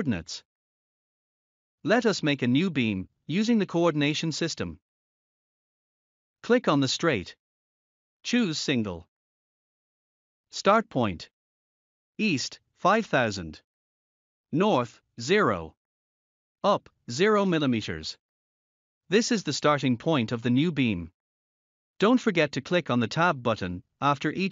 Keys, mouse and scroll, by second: 1.3 scroll up 1, 4.2 click, 12.3-13.6 typing, 16.4 Tab, 17.3 0, 19.5 Tab, 19.9 0, 21.7 Return.